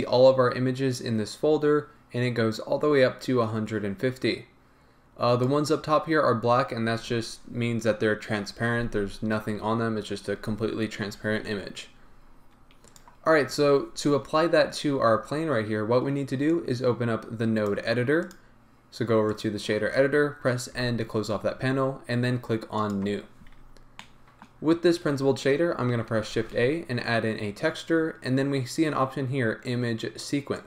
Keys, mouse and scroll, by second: 0.0-30.6 drag.